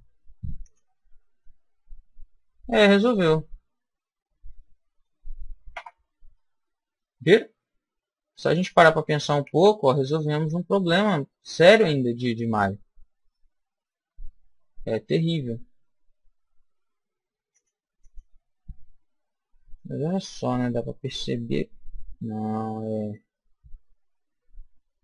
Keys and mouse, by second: 1.7-3.3 middle drag, 3.4-4.9 middle drag, 5.7 Tab, 8.1 middle click, 9.5 Tab, 11.7 Tab, 12.3-13.5 middle drag, 17.5 click, 18.7 middle click, 19.8-23.9 middle drag.